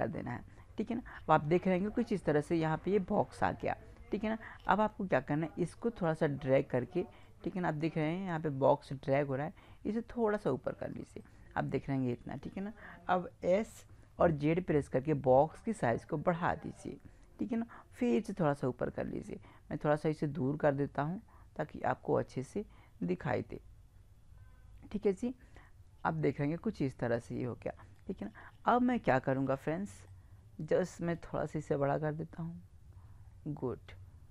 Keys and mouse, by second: 1.3-4.1 middle drag, 4.4-7.2 middle drag, 7.2-8.8 drag, 11.2-13.5 middle drag, 13.5 s, 16.4-18.9 drag, 18.9-23.0 middle drag, 27.2-34.3 middle drag.